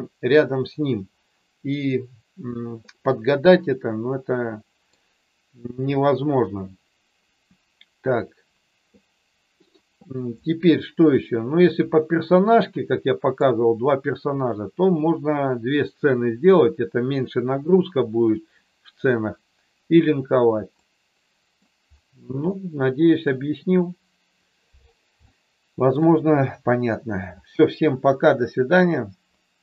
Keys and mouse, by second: 3.0-4.8 middle drag, 12.3-13.4 middle drag, 20.8 middle click, 22.5 middle click, 25.3 shift+middle click.